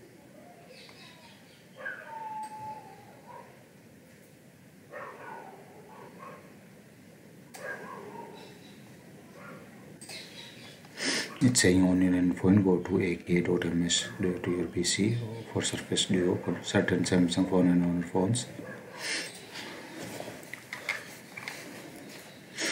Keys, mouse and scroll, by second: 2.4 click, 7.4 click, 10.0 click, 17.0 scroll, 19.2 click, 20.6-21.3 scroll.